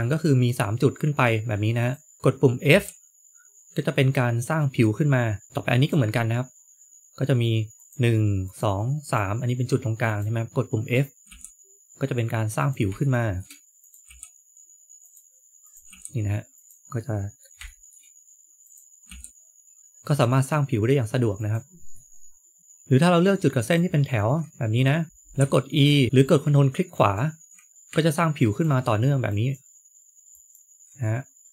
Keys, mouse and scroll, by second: 1.7 click, 2.6 f, 5.5 middle click, 5.5 click, 7.7 click, 8.9 click, 10.0 click, 11.2 f, 12.9 shift+middle click, 13.7 click, 14.0 f, 15.6 click, 15.8 f, 16.9 middle click, 17.6 shift+middle click, 18.6 click, 19.0 f, 21.8 middle click, 23.5 ctrl+click, 25.0 ctrl+z, 25.0 ctrl+right click, 25.3 e, 26.0 shift+middle click, 26.8 shift+middle click, 27.0 ctrl+right click, 27.6 ctrl+right click, 27.7 ctrl+z, 28.3 ctrl+right click, 29.2 ctrl+right click, 30.2 ctrl+right click, 31.1-31.5 scroll down 2.